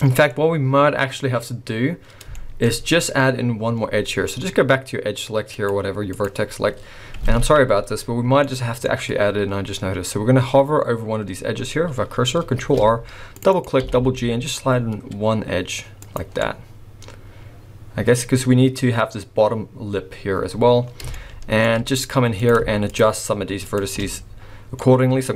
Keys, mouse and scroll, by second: 0.1 middle click, 0.3 scroll up 2, 2.4 shift+middle click, 2.7 scroll up 1, 5.6 click, 6.1 click, 6.8-7.2 scroll down 1, 7.4 alt+a, 8.4 middle click, 12.7 ctrl+r, 13.8 g, 16.3 scroll down 2, 16.4 middle click, 18.1-19.4 scroll up 3, 19.4 scroll up 1, 21.1 shift+middle click, 21.9 scroll up 1, 22.4 click, 22.9 shift+click, 23.6 shift+click, 24.8 middle click.